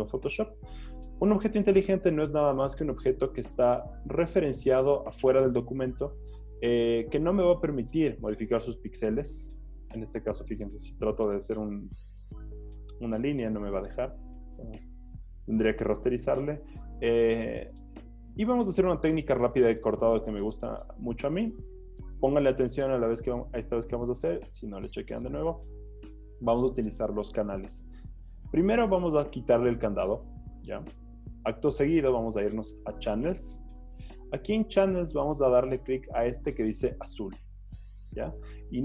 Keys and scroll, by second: 11.3 b.